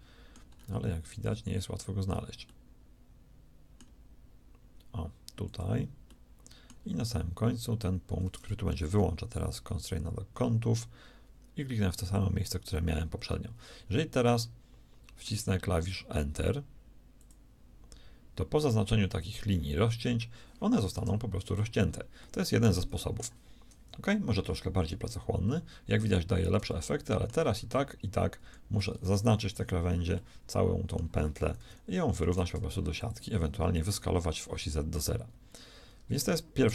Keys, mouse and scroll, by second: 23.7 KP_1, 27.6 shift+a, 31.5 KP_1, 32.3 shift+s.